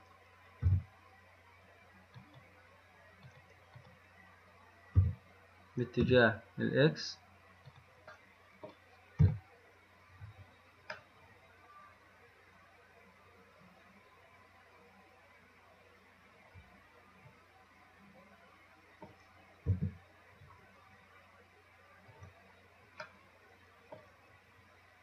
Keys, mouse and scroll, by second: 0.1 click, 0.9 g, 2.4 click, 3.5 click, 4.0 click, 5.2 g, 9.5 KP_7, 11.2-14.3 middle drag, 14.5 middle click, 14.7 middle click, 15.1 middle click, 15.3 middle click, 15.5 middle click, 15.6 middle click, 19.9 KP_3, 23.3-25.0 middle drag.